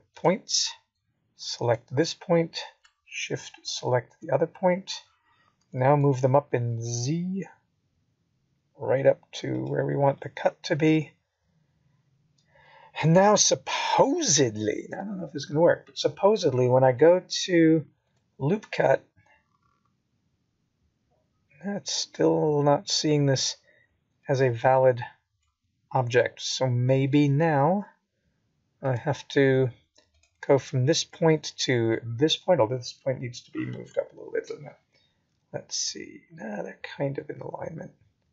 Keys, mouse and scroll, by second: 0.4 click, 1.6 click, 3.8 right click, 7.0 click, 12.3 click, 13.9 click, 15.6 right click, 18.6 click, 20.1 click, 22.1 shift+click, 24.1 g, 28.6 middle click, 33.4 click, 36.5 click.